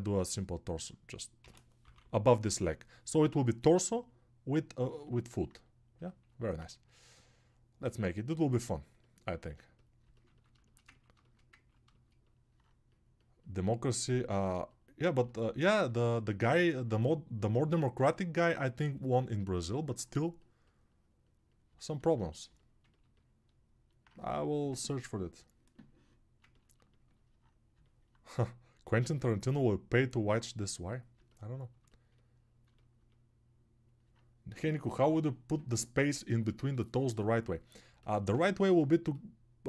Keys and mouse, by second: 1.4-8.3 right drag, 1.4 g, 1.8-4.9 ], 4.9-8.3 alt+drag, 4.9-8.3 alt+middle drag.